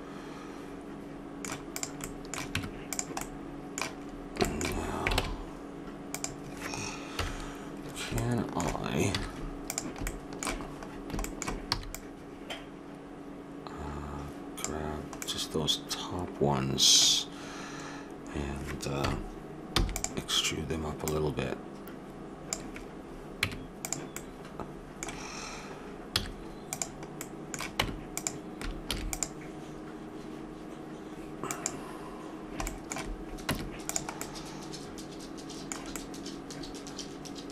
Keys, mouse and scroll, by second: 0.7 middle click, 1.7 click, 2.0-3.6 middle drag, 2.5 Tab, 5.2 ctrl+Tab, 7.1 KP_1, 9.1 z, 11.7 b, 15.4-17.0 middle drag, 19.0 KP_1, 19.7 e, 21.0-22.7 drag, 23.4 Tab, 24.1-25.9 middle drag, 26.1 z, 27.8 Tab, 28.3 middle click, 28.9 ctrl+r, 33.5 Tab.